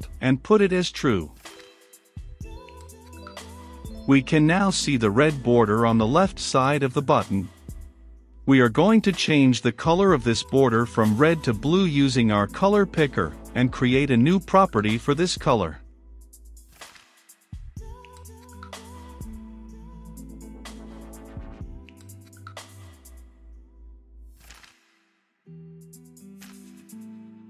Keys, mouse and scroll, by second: 0.4 Return, 1.0 t, 1.1 r, 1.3 u, 1.4 e, 3.3-18.4 drag, 18.4 right click, 19.0-22.0 drag, 22.0 right click, 22.8-26.6 drag, 26.6 middle click.